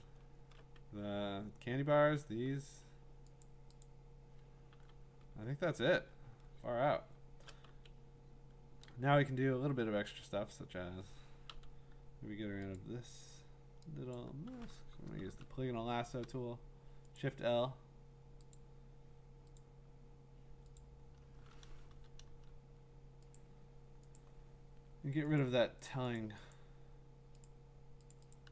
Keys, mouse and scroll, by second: 0.8 scroll, 3.4 click, 3.8 click, 4.7 v, 5.3-6.3 scroll, 6.3 scroll down 6, 7.0-7.7 scroll down 5, 7.7 v, 7.8 scroll, 10.4 middle click, 11.5 i, 12.8 click, 14.1 click, 15.3 l, 17.2 click, 18.5 click, 19.6 click, 20.8 click, 21.9 BackSpace, 22.3 BackSpace, 23.3 click, 24.2 click, 25.4 click, 26.2 click, 26.5 click, 27.4 click, 28.1 click, 28.3 click.